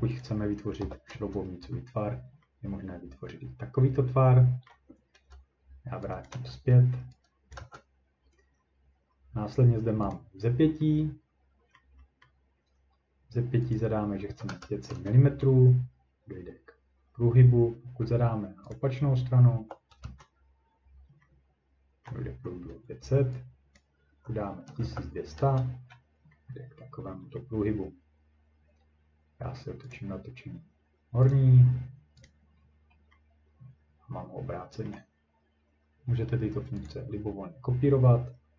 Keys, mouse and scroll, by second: 0.2 click, 0.6-1.3 typing, 3.1 click, 4.7-5.2 ctrl+scroll, 6.3 click, 6.3 0, 7.5 click, 7.6 0, 10.1 click, 10.4 scroll, 10.5-10.9 scroll up 1, 11.8-12.3 scroll down 2, 13.7 click, 13.7-14.3 scroll, 14.1-15.0 typing, 15.5-15.9 scroll, 18.7 click, 19.6 typing, 20.0 Return, 22.1 ctrl+middle click, 23.8 click, 24.4-25.3 typing, 25.2 ctrl+scroll, 25.4 Return, 25.9 scroll, 26.8 scroll, 27.3 middle click, 29.9 click, 31.3 click, 32.2 click, 32.2 scroll up 3, 32.6-33.1 scroll, 33.3 scroll down 1, 33.7 scroll, 34.9 ctrl+scroll, 36.9 click.